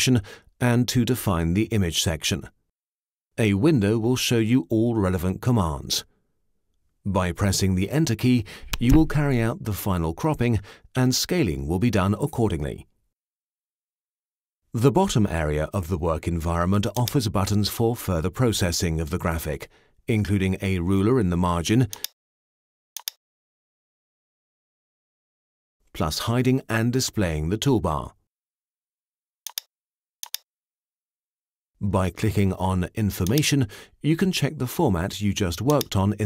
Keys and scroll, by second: 8.7 Return.